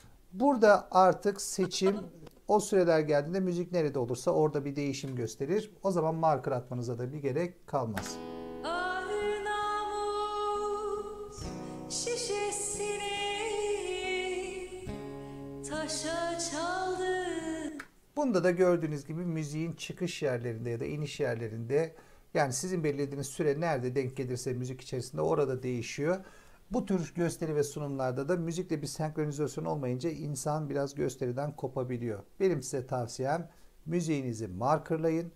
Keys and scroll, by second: 7.9 space, 17.6 space.